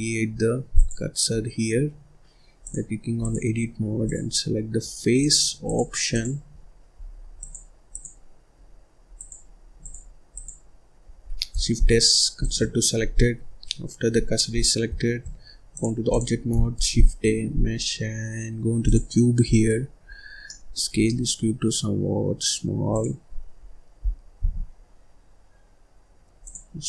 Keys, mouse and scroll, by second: 0.2-0.6 scroll up 1, 0.6 click, 1.3-2.5 scroll down 1, 2.5-4.0 drag, 4.6-5.1 scroll up 1, 5.1-6.1 drag, 7.3-9.2 drag, 9.7 click, 10.2 click, 11.7 shift+s, 13.1 scroll up 2, 13.4-15.1 scroll down 1, 15.6-16.6 drag, 16.6 shift+a, 19.4-20.0 scroll down 10, 20.0-20.4 scroll up 3, 20.4 middle click, 20.8 s, 23.1-23.9 scroll up 7, 23.9-24.3 scroll down 1, 24.3 s, 26.6-26.8 scroll up 1.